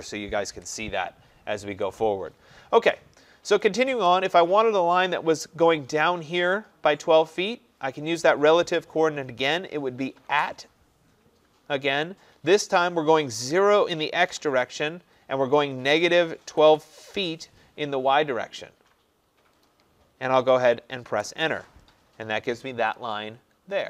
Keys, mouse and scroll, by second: 2.0 click, 9.3 click, 10.3 @, 13.5-14.3 typing, 15.8-17.2 typing, 21.1 Return.